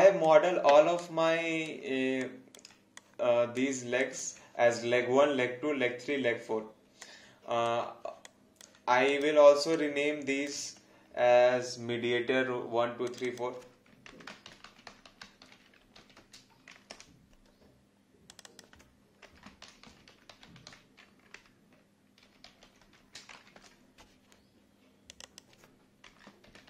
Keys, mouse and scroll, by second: 1.0 alt+click, 2.2 alt+click, 4.0 alt+click, 7.0 click, 8.3 click, 9.8 click, 14.2-16.6 typing, 16.9 Return, 18.3 click, 19.4-23.3 typing, 25.1 click, 26.5-26.6 typing.